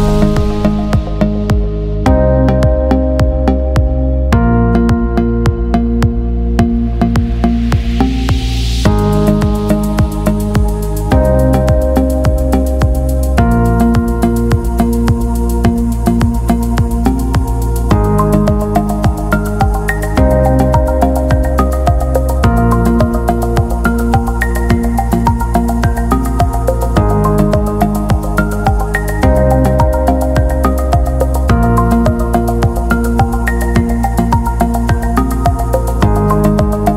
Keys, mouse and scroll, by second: 0.0 click, 3.8 click, 7.7 click, 13.9 click, 15.6 click, 23.4 click, 28.8 click, 33.5 click, 35.3 right click, 35.8 click.